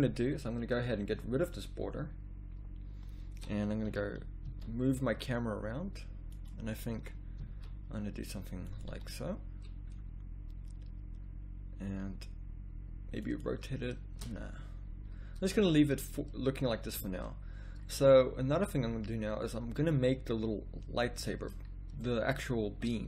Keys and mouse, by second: 1.3-2.7 drag, 3.9 r, 7.0 r, 8.9 g, 14.4 ctrl+z, 15.0 ctrl+z, 16.8 a.